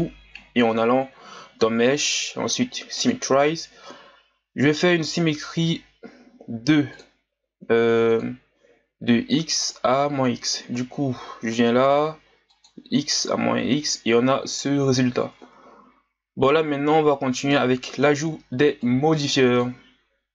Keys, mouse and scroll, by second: 6.9-11.3 drag, 14.8 Tab, 17.6-20.3 drag.